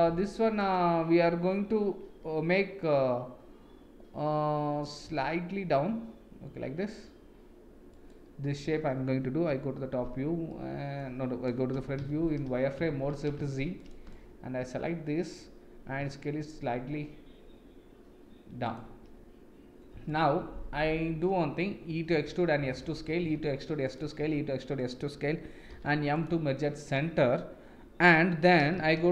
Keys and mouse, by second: 5.1 s, 9.5 KP_7, 10.5 middle click, 11.7 KP_1, 12.6 shift+z, 12.9 shift+z, 13.5 shift+z, 13.8 click, 14.1 click, 16.0 s, 20.1 alt+click, 20.8 middle click, 21.9 e, 23.0 e, 24.0 e, 25.7 m, 28.9 shift+z.